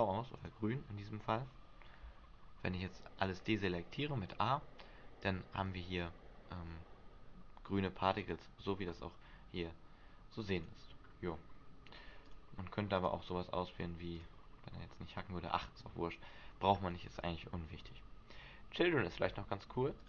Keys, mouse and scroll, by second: 0.5 right click, 2.5 a, 5.8-6.4 scroll down 2, 6.4-7.2 scroll up 1, 8.3 right click, 10.7 click, 11.2 scroll down 1, 12.3 scroll down 2, 12.4 click, 14.3 click.